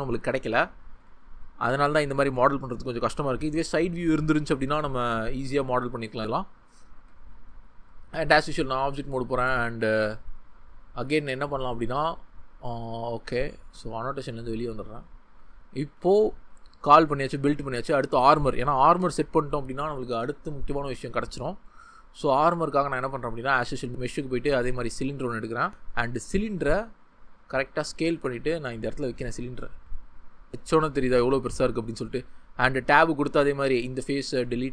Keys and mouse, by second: 7.5 ctrl+middle click, 9.6 Tab, 13.6 ctrl+z, 27.4 s, 27.8-28.1 drag, 28.1 g, 29.0 click, 29.7 s, 31.1 click, 32.2 Tab, 32.8 click, 33.4 3, 33.6 click, 34.1 x.